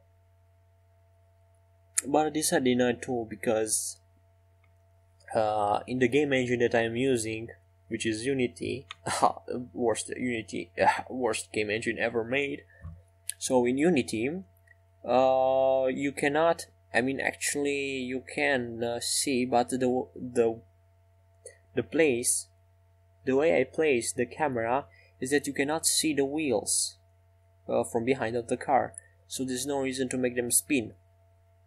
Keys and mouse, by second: 5.2 r, 11.8-13.3 middle drag, 13.3-15.2 drag, 15.2 middle click, 24.6 middle click, 28.7-31.6 middle drag.